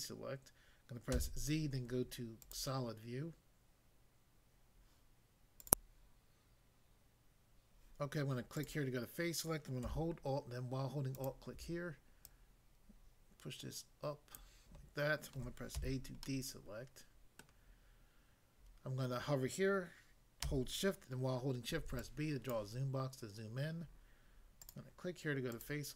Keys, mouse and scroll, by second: 1.1 z, 2.4 click, 5.6 click, 5.8 click, 8.6 click, 11.1 alt+click, 12.3 alt+click, 14.4 click, 15.8 a, 16.3 middle click, 17.4 middle click, 21.7 b, 22.0 click, 22.5 click, 24.6 click, 25.5 click.